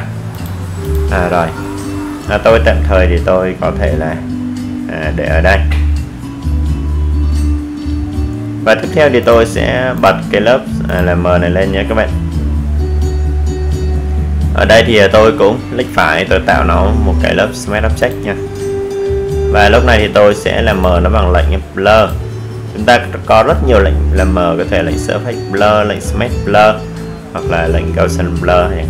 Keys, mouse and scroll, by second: 1.6 click, 7.7 right click, 9.8 click, 11.9 click, 22.0 click, 24.9-28.8 drag.